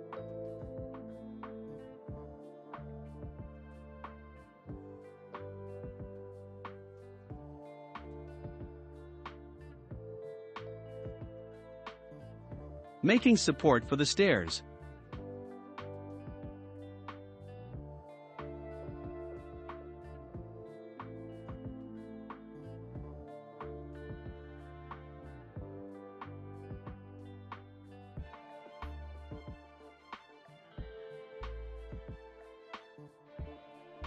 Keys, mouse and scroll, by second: 1.1 click, 2.0-3.5 middle drag, 3.5-6.5 scroll up 1, 7.1-7.6 middle drag, 7.6-8.3 scroll up 1, 8.3 click, 8.8-10.9 middle drag, 10.9 shift+d, 12.8-13.2 middle drag, 13.2 scroll up 2, 13.7-15.1 middle drag, 15.1 e, 18.7 s, 22.6-24.5 shift+middle drag, 24.5-24.9 scroll up 2, 25.6 click, 29.4 ctrl+a, 32.9-34.0 drag.